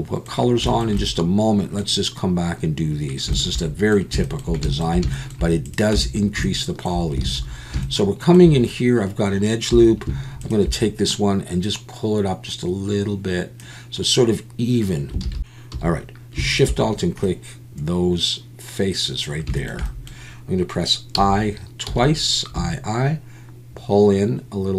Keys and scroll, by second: 0.6 ctrl+s, 5.9 Tab, 7.2 alt+a, 9.7 2, 15.2 alt+a, 15.7 3.